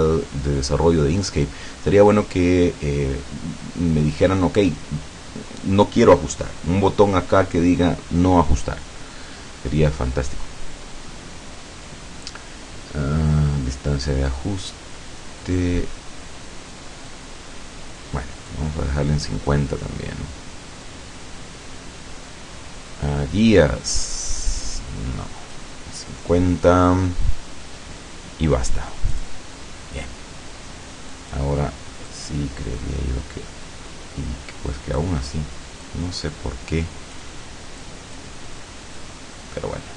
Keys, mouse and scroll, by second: 17.1-18.7 drag, 24.7-25.8 drag, 29.2 click, 31.2 click, 32.1-35.2 drag, 35.9-37.4 drag, 37.9 click, 39.0-39.9 drag.